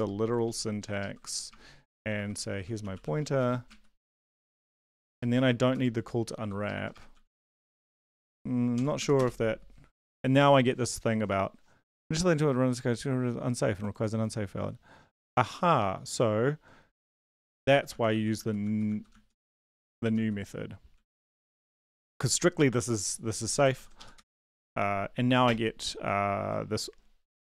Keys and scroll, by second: 0.2 Right, 0.8 Left, 1.5-6.9 typing, 6.4 shift+End, 6.6 shift+Left, 7.1 ctrl+s, 8.7 ctrl+l, 9.0 Up, 9.1 Return, 17.5 ctrl+z, 17.7 ctrl+z, 17.9-19.6 ctrl+z, 20.9 ctrl+s, 23.7 ctrl+l, 24.0 Up, 24.1 Return.